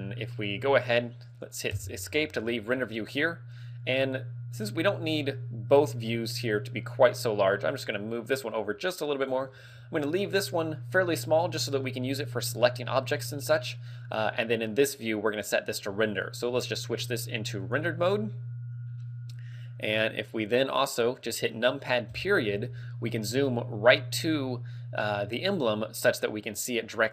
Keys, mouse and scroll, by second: 2.2 Escape, 2.6 scroll down 1, 2.9 scroll up 1, 4.8 click, 4.8 scroll up 1, 7.5 click, 9.7 scroll down 4, 11.5 middle click, 12.7 middle click, 13.7 middle click, 16.5 click, 22.2 KP_Decimal, 22.4 KP_Decimal.